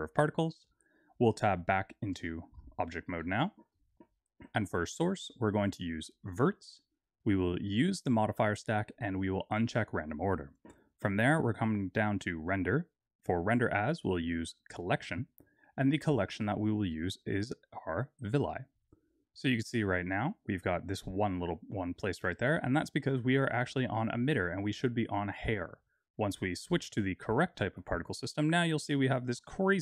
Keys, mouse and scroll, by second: 1.3 Tab, 2.2 shift+middle click, 2.7-3.1 scroll up 6, 3.1 shift+middle click, 3.9-4.6 scroll down 1, 4.8 click, 5.4 click, 7.8 click, 9.6 click, 12.3 click, 13.5 click, 15.3-16.2 scroll down 1, 16.2-16.6 scroll down 4, 16.6 click, 22.0-25.1 scroll up 1, 25.3 click, 27.9-28.3 scroll down 2.